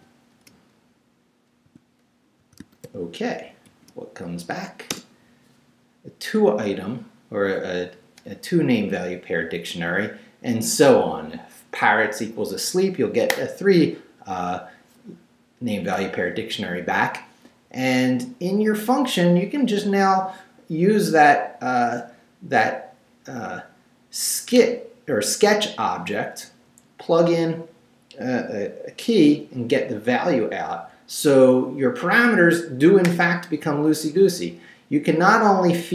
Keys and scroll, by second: 1.7-4.2 typing, 4.9 shift+Return.